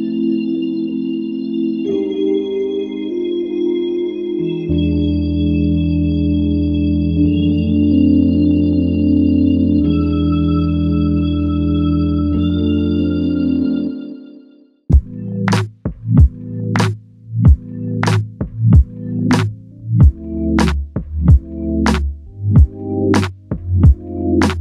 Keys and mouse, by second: 2.4 double click, 11.2 double click, 17.3 double click, 21.6 alt+click, 23.6 alt+click.